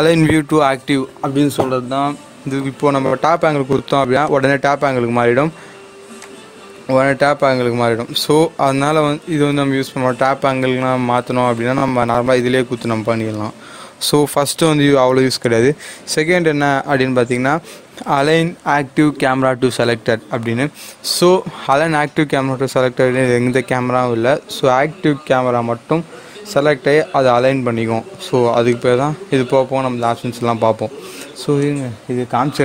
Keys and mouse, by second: 4.2-14.6 drag, 14.7 click, 21.6 click, 28.7 click, 31.5 click.